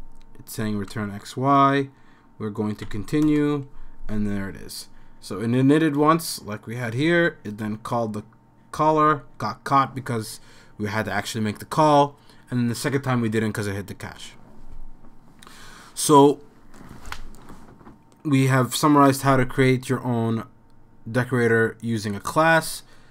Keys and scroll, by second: 2.9 c, 3.2 Return.